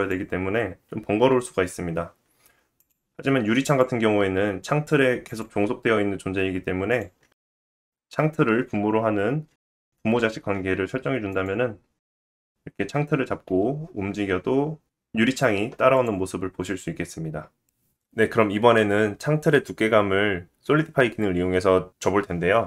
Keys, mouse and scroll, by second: 2.8 click, 2.9 middle click, 3.7 click, 3.8-5.3 middle drag, 5.3 click, 6.9 click, 7.3 click, 10.2 ctrl+p, 12.0 click, 12.1-17.3 middle drag, 13.5 g, 17.3 click, 17.4-22.6 middle drag.